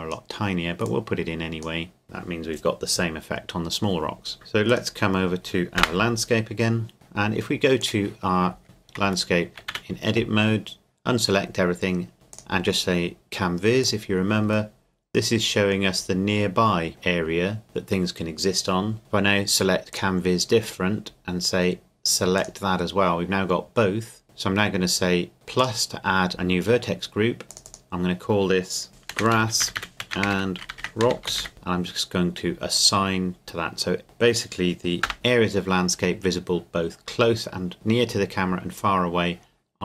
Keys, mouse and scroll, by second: 4.3 click, 5.8 KP_0, 6.9 middle click, 7.8 click, 8.2-8.6 scroll down 1, 8.6 Tab, 9.3 shift+middle click, 9.7 a, 12.3 click, 14.7 middle click, 16.6-17.6 scroll down 2, 19.9 click, 22.4 click, 25.6 click, 27.5 click, 28.9-31.4 typing, 31.5 Return, 32.8-34.5 drag, 35.0 KP_0.